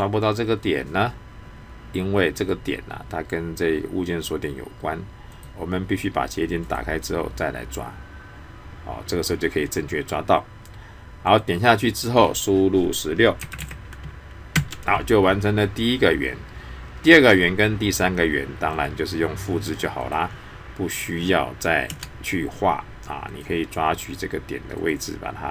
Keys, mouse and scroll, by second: 2.4 click, 5.3 click, 11.3 click, 18.7 click, 23.3 click.